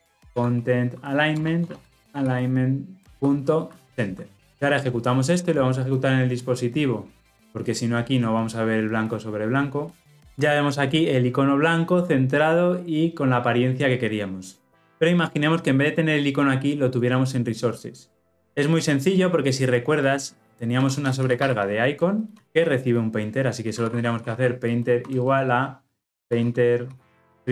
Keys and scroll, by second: 1.3 Return, 5.8 shift+F10.